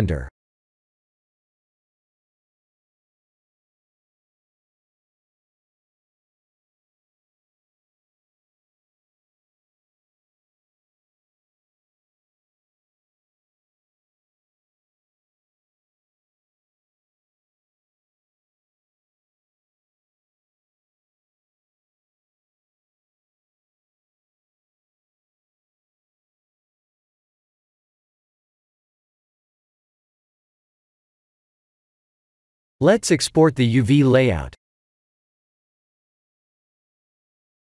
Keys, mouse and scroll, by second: 4.9 scroll up 5, 5.2 scroll down 1, 5.2-6.1 scroll up 3, 6.1 s, 8.9 scroll up 3, 10.3 s, 15.3 click, 17.0 middle click, 18.4 KP_1, 19.0 KP_7, 23.4 Tab, 24.2 a, 25.8 3, 26.9 u, 30.2 click, 31.1 a, 32.3 click, 33.0 click, 36.2 click.